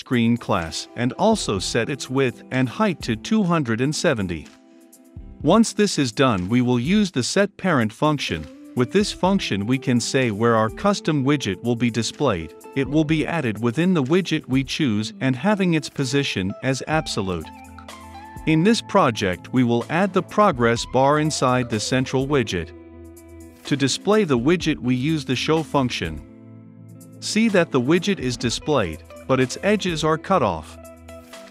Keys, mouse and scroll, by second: 0.0-5.4 typing, 5.2-10.7 drag, 11.8-15.1 drag, 15.1-17.1 right drag, 17.1-20.3 drag, 20.1-26.0 typing, 21.8 click, 23.5 Return, 27.4 ctrl+F5, 30.3-31.5 drag.